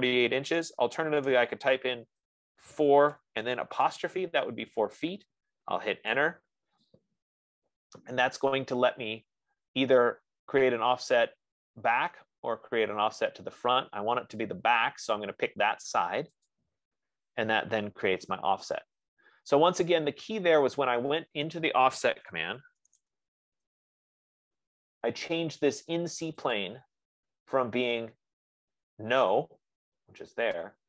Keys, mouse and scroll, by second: 0.1-1.6 typing, 2.9-4.3 typing, 3.1 click, 6.6 Return, 17.2-20.4 drag, 22.4-23.9 typing, 27.0 click.